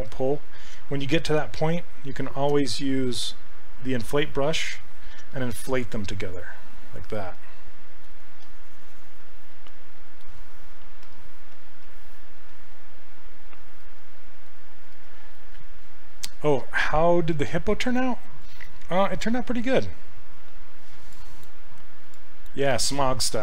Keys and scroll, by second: 11.5 s.